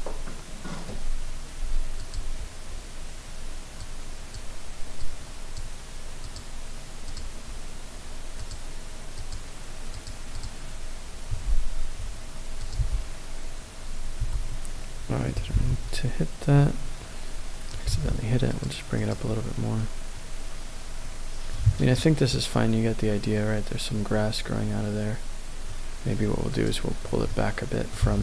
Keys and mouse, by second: 3.8-4.4 drag, 5.0 click, 6.2 click, 7.0-9.5 drag, 9.9 click, 10.3 click, 12.8 n, 14.3 h, 16.7 ctrl+z, 16.7-17.8 middle drag, 17.9 g, 18.0 z, 19.0 click, 20.1-21.8 middle drag, 21.8 KP_0, 25.7-26.7 middle drag, 27.3-27.6 middle drag, 27.5 click, 27.6 click, 27.9 g.